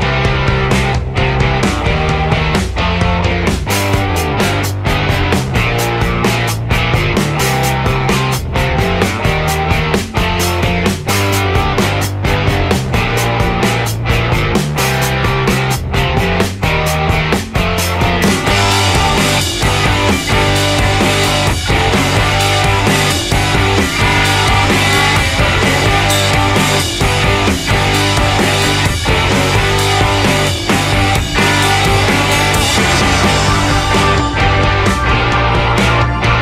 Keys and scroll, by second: 4.9-5.9 typing.